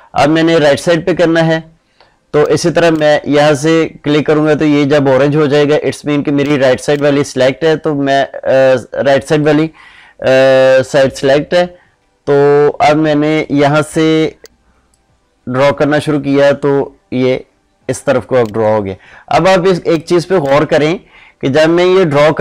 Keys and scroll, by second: 19.7 ctrl+space.